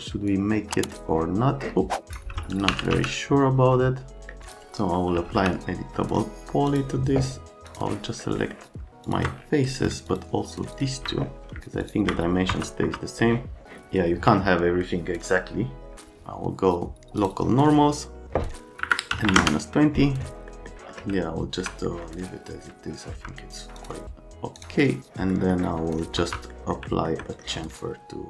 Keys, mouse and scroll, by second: 0.3 click, 2.1 right click, 2.5-3.4 typing, 2.5 click, 4.4 click, 4.9-5.8 typing, 6.7 click, 7.7 click, 8.4 right click, 9.0 ctrl+click, 10.0 ctrl+click, 10.7 ctrl+click, 11.8 ctrl+s, 12.8 F3, 13.0 right click, 17.1 click, 18.8 KP_Subtract, 19.1 KP_2, 19.2 KP_0, 19.3 KP_Enter, 20.5 middle click, 20.8 middle click, 21.1 alt+middle click, 23.1 F3, 23.8 click, 24.6 click, 25.3 middle click.